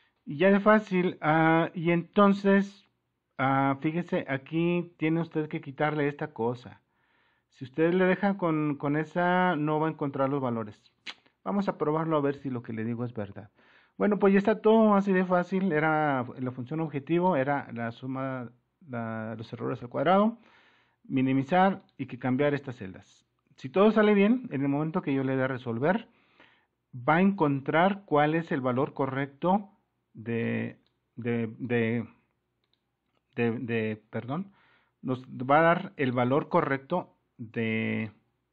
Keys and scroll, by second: 1.8 super+-.